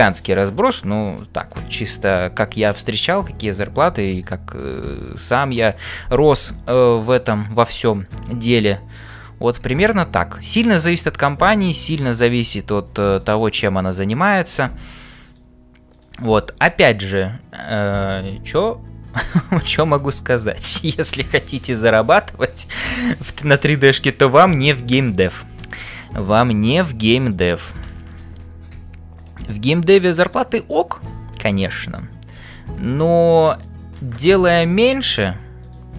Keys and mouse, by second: 4.2 shift+middle click, 4.8 middle click, 7.9 middle click, 9.0 click, 11.2 click, 11.8 middle click, 12.4 f, 13.9 click, 16.6 f, 17.6 click, 18.3 f, 19.9-21.0 middle drag, 25.6 middle click, 27.8 middle click, 29.2-30.8 middle drag, 31.2 f, 31.7 middle click, 32.9 middle click, 34.1 middle click, 34.9 g.